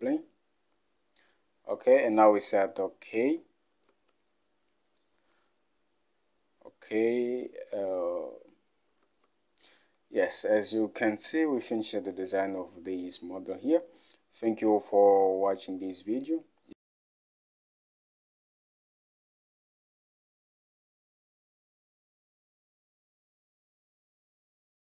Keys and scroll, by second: 4.0 alt+Tab.